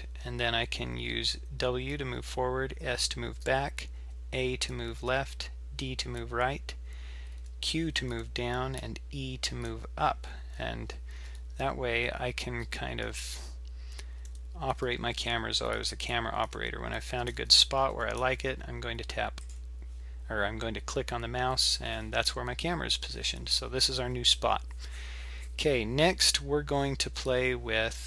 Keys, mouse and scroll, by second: 26.7 z, 26.9 z.